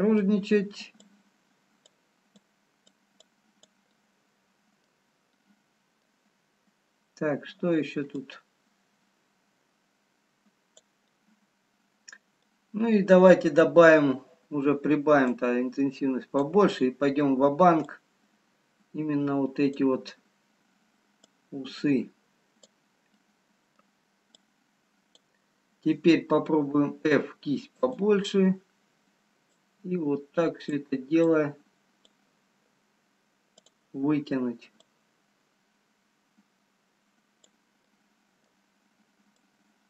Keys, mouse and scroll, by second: 0.3 middle click, 1.1 click, 2.8 click, 3.6 click, 3.9 middle click, 5.5 middle click, 8.4 click, 11.1 middle click, 11.2-11.7 scroll down 2, 13.7 middle click, 13.7-14.0 scroll up 1, 15.4 click, 17.4-17.7 scroll down 1, 18.3 click, 21.2 click, 23.3 middle click, 23.3 scroll down 1, 24.4 click, 26.8 f, 28.9 scroll up 1, 31.2 click, 31.8 click, 34.8 click, 34.8 click, 37.8 middle click, 39.4 click.